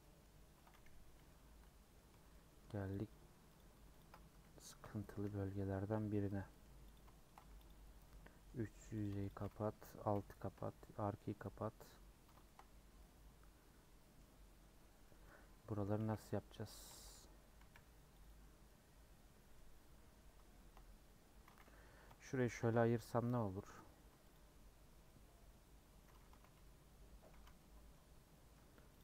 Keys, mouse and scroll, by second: 0.0-1.1 middle drag, 1.1 /, 1.3 middle click, 2.1 3, 2.2 scroll down 3, 2.3 middle click, 2.6 scroll up 1, 2.9 click, 3.5 click, 4.0 ctrl+click, 4.8 ;, 5.1 middle click, 5.6 scroll up 2, 5.9 middle click, 6.9 click, 7.1 shift+middle click, 7.4 3, 7.6 click, 8.0-9.0 middle drag, 9.0 click, 10.1 ;, 10.5 middle click, 11.2 scroll up 1, 11.4-12.7 middle drag, 12.7 scroll down 1, 13.0-14.2 middle drag, 14.2 scroll up 1, 14.7 scroll down 1, 15.2-16.2 middle drag, 16.2 c, 17.0 3, 17.7 c, 18.6-22.1 middle drag, 22.1 ;, 22.8 a, 23.1 i, 25.0-26.4 middle drag, 26.4 alt+z, 26.6 middle click, 27.3 alt+z, 27.6-28.6 middle drag, 28.6 3, 28.9 click.